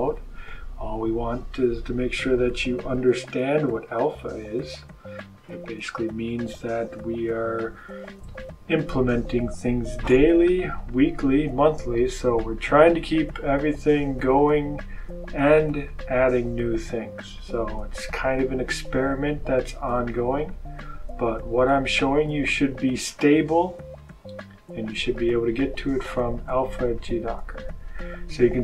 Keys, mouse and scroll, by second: 2.8 click, 4.5 click, 22.9 click, 24.7 click.